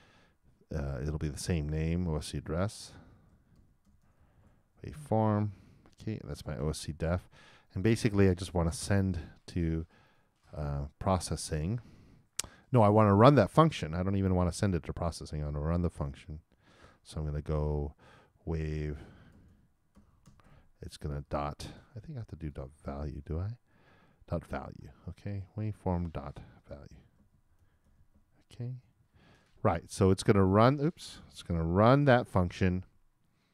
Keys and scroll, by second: 4.4 shift+m, 5.8 shift+0, 6.0 shift+;, 16.6 shift+`, 28.1 shift+e, 28.7 shift+;.